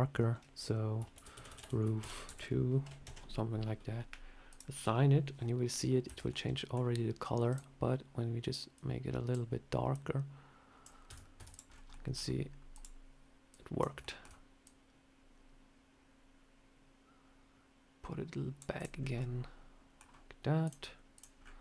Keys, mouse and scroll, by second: 1.4 o, 4.4 click, 6.0 Tab, 6.2 middle click, 7.4 click, 11.0 Tab, 11.3 Tab, 11.4 click, 11.6 scroll down 3, 11.8 middle click, 12.6 click, 13.4 click, 13.9 shift+middle click, 14.5 click, 18.6 click, 18.8 scroll down 3, 19.0 scroll up 1, 19.1 middle click, 19.9 scroll down 1, 20.5 click, 21.3 scroll up 4.